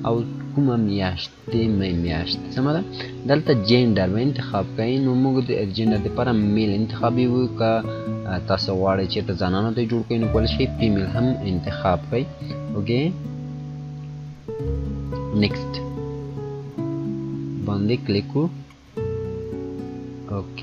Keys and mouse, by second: 3.4 click, 10.8 click, 13.1-16.7 drag, 20.1 click.